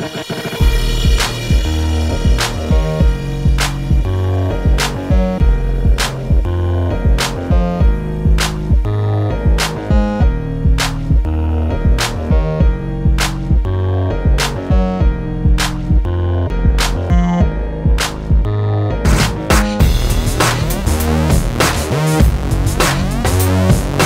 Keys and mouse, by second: 0.8 middle click, 1.4 alt+s, 2.2 click, 3.2 KP_7, 3.7 ctrl+r, 5.9 middle click, 6.4 click, 6.9 middle click, 7.6 ctrl+Tab, 8.5 ctrl+KP_Add, 8.7 i, 9.3 alt+s, 9.7 alt+m, 10.5 click, 10.8 a, 10.9 ctrl+Tab, 11.6 middle click, 12.1 click, 12.7 click, 13.0 click, 13.9 middle click, 14.4 middle click, 14.8 click, 14.9 middle click, 16.0 ctrl+b, 17.8 ctrl+KP_Subtract, 18.4 alt+s, 20.2 ctrl+b, 21.4 ctrl+KP_Subtract, 21.7 alt+s, 22.4 ctrl+b.